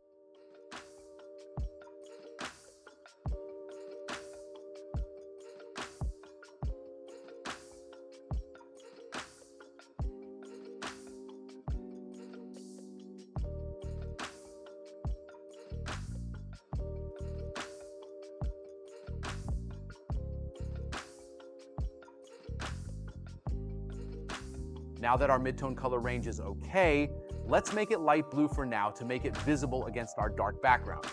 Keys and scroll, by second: 9.2 space, 10.2 space, 10.8 space, 11.8 space, 15.8 space, 21.7 space.